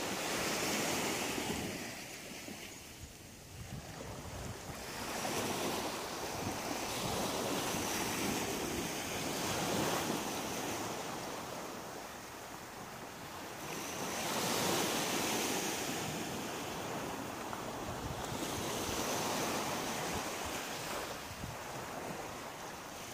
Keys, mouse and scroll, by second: 0.3 shift+right click, 0.8 shift+right click, 1.8 shift+middle click, 3.0 shift+right click, 4.4 f, 4.9 middle click, 7.9 click, 10.0 shift+middle click, 11.1 middle click, 11.9-12.6 scroll down 6, 12.9 shift+middle click, 13.7 middle click, 16.7 ctrl+z, 17.5 middle click, 19.0 shift+middle click, 20.1 middle click, 21.4 shift+middle click.